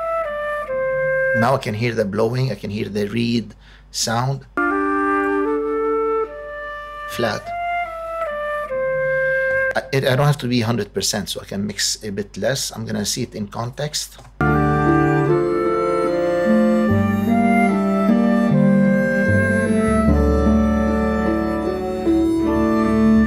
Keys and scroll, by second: 1.2 space, 4.3 space, 9.5 space, 14.1 space.